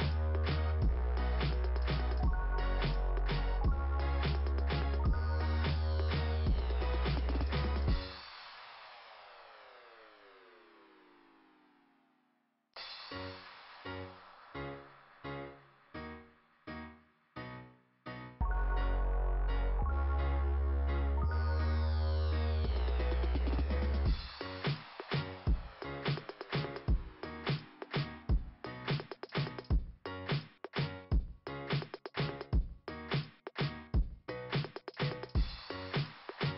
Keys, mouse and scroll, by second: 4.9-5.8 scroll down 1, 6.9 click, 7.2 click, 18.1-18.7 scroll down 2, 19.5 scroll down 1, 20.3-20.8 scroll down 1, 21.8 scroll down 1, 24.7 click, 25.0 click, 26.8 click, 26.9 click, 28.4 scroll down 2, 33.7 click.